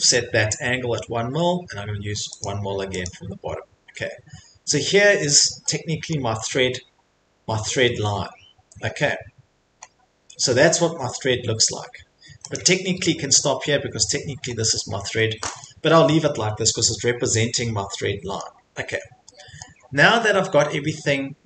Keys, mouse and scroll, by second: 0.6-1.4 scroll, 2.4 click, 2.9 middle click, 3.0 click, 3.5 middle click, 3.6 middle click, 3.6 Escape, 3.9 Escape, 6.1 middle click, 6.5 middle click, 6.5 middle click, 6.9 middle click, 7.3 middle click, 8.2 middle click, 9.8 middle click, 9.9 middle click, 10.3 scroll, 10.4 middle click, 11.6 middle click, 11.6 middle click, 12.5 click, 14.5 middle click, 14.6 middle click, 15.1 middle click, 15.3 middle click, 15.5 Escape, 15.6 middle click, 15.7 middle click, 17.4 middle click, 17.4 middle click, 18.4 middle click, 18.7 middle click, 18.8 middle click, 18.8 middle click, 19.6 middle click, 19.8 middle click, 19.8 middle click, 19.9 middle click, 21.3 middle click.